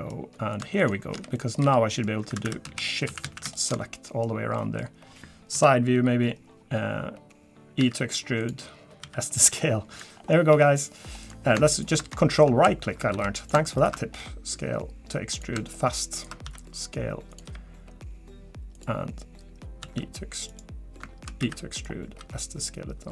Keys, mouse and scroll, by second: 0.5 click, 0.8 shift+click, 1.1 f, 1.3 middle click, 1.6 f, 1.9 middle click, 2.3 2, 2.6 a, 3.5 alt+shift+click, 3.9 middle click, 4.2-4.6 scroll down 3, 4.6 middle click, 5.5 KP_3, 6.3 scroll down 2, 7.8 e, 9.0 s, 10.1-10.5 scroll down 2, 10.5 r, 11.7 ctrl+right click, 12.2 shift+middle click, 12.4 shift+scroll up 1, 13.1 s, 13.8 ctrl+right click, 14.2 s, 16.2 ctrl+right click, 16.4 s, 17.4 g, 19.8 s, 21.4 e, 22.2 s.